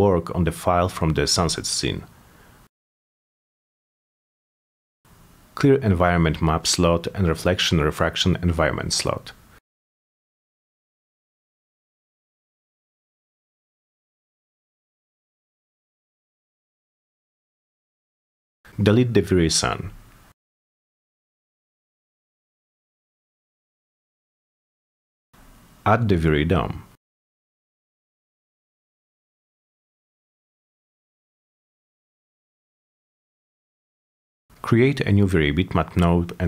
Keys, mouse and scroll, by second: 0.1 x, 0.7 8, 5.6 right click, 6.4 click, 7.7 click, 11.1 click, 12.3 right click, 13.1 click, 14.3 click, 15.8 click, 18.5 click, 24.1 click, 25.9 click, 26.9 right click, 29.4 m, 30.5 middle drag, 31.1 click, 32.5 click, 33.3-36.3 typing.